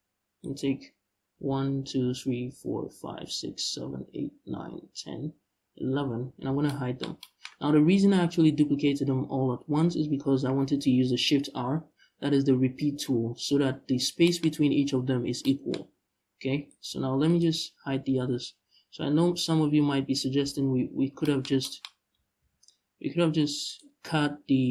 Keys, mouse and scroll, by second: 0.0 right click, 1.0 l, 6.1 h, 7.7-8.6 scroll down 2, 14.2-14.7 scroll up 1, 15.4-16.4 scroll up 1, 16.4 right click, 16.9 right click, 17.7 l, 20.1 h, 22.1 ctrl+z, 23.3 right click, 24.1 l.